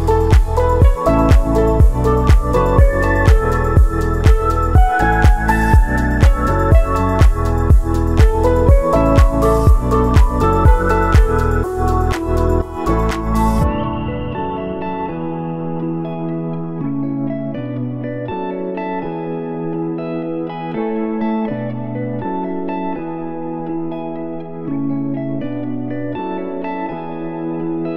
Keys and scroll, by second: 6.8 ctrl+z, 16.6 ctrl+z.